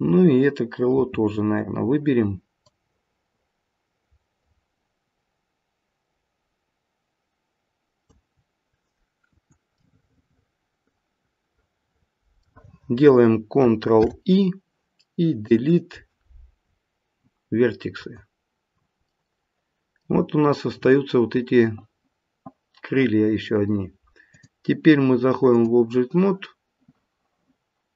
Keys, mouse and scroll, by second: 0.9 c, 9.8 middle click, 11.8 middle click, 12.1 middle click, 14.0 ctrl+i, 15.5 Delete, 19.1 middle click, 20.3-22.0 scroll down 1, 24.3 click.